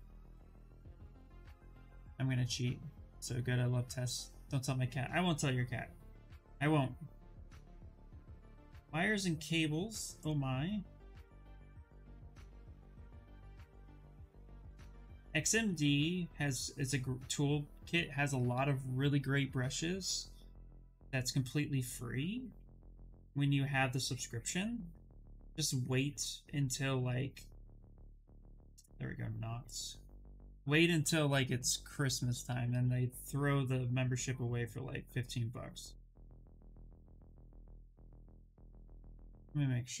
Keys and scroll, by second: 39.7-40.0 typing.